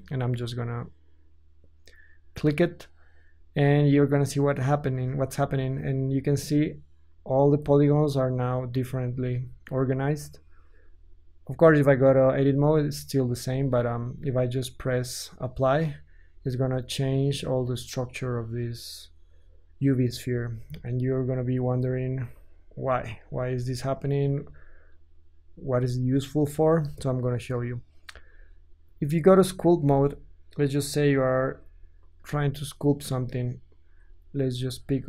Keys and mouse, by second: 12.4 Tab, 13.4 Tab, 16.3 Tab, 20.3 Tab, 20.8 ctrl+z, 21.3 ctrl+z, 21.8 ctrl+z, 22.4 ctrl+z, 23.4 Tab, 26.9 KP_1, 28.3-32.2 ctrl+drag, 28.8 ctrl+Tab, 31.4 f, 32.2-34.3 middle drag, 32.2 g, 33.8 t, 34.3 click, 34.4 middle drag, 34.5 click, 34.6 middle click, 34.7 click, 34.9 middle click.